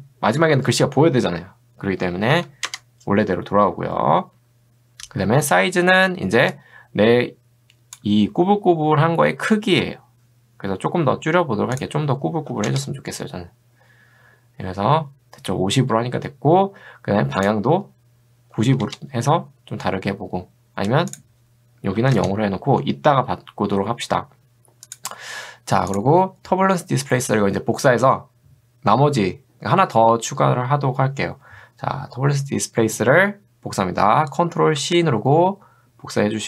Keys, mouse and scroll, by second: 2.3 0, 6.5-8.1 drag, 12.4 5, 12.7 Return, 17.4 click, 18.6 9, 18.9 Return, 21.2 click, 22.0 0, 22.2 Return, 24.9 click, 34.8 ctrl+c.